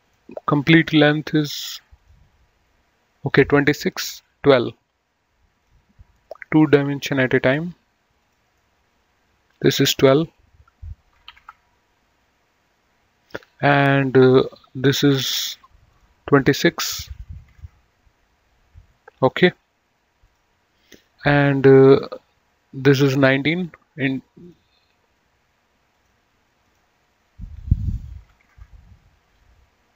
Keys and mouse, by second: 0.3 click, 2.2 click, 5.9 click, 7.4 click, 8.7 right click, 11.3 KP_1, 11.6 Return, 13.7 click, 15.2 click, 17.4 KP_2, 17.6 KP_6, 17.8 Return, 20.5 click, 24.6 click, 26.1 click, 28.4 KP_1, 28.5 KP_9, 28.7 KP_Enter.